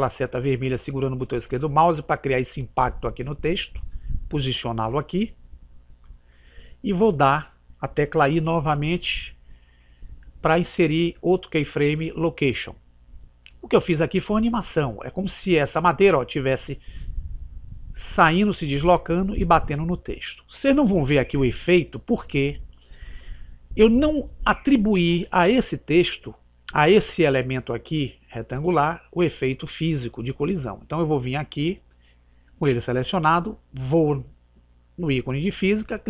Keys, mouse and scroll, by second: 8.6 i, 14.5 click, 16.7 click, 20.1 click.